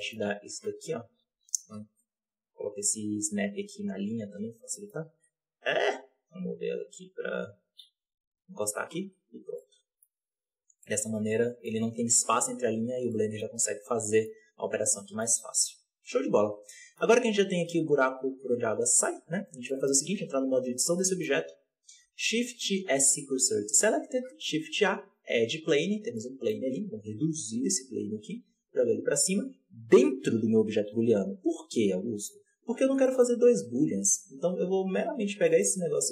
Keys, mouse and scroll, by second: 9.1-9.4 scroll down 4, 9.4 Tab, 9.5-10.1 middle drag, 10.1-10.5 scroll down 3, 10.5 Tab, 10.7-12.3 middle drag, 12.3 scroll up 2, 12.6 Tab, 12.8-13.1 scroll down 2, 13.1-13.6 middle drag, 13.6-14.0 scroll down 1, 14.0-14.3 middle drag, 14.3-14.9 scroll down 4, 14.9-15.5 middle drag, 15.5 right click, 16.2-16.6 scroll up 4, 16.6-17.5 middle drag, 17.5-19.6 drag, 19.6-20.0 shift+middle drag, 20.0 Tab, 20.9-23.3 middle drag, 23.3 shift+s, 24.9 shift+a, 25.3-26.1 scroll down 12, 26.1-26.8 middle drag, 26.8 s, 27.7-28.3 scroll up 6, 28.3 g, 31.6 KP_7, 32.0 z, 32.5-32.9 scroll up 2, 32.9 g, 34.9 g.